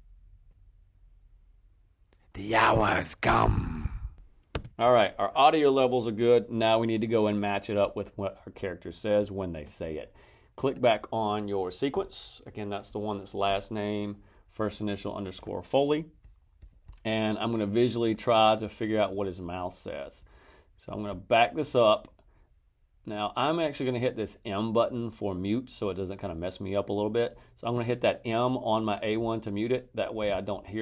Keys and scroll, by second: 4.5 space.